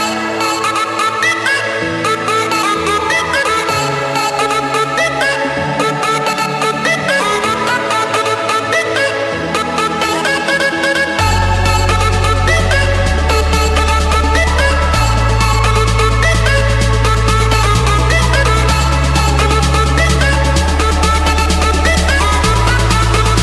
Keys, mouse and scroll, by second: 0.6 right click, 1.8 click, 2.8 click, 3.3-4.4 drag, 5.8-6.8 drag, 7.5-8.6 drag, 8.9 4, 9.7 Return, 11.1 Escape, 11.8 click, 13.5-14.0 typing, 14.6 Return, 15.8 click, 16.1 Return, 16.6 click, 16.9 Return, 21.2-22.2 middle drag, 23.0-23.4 drag.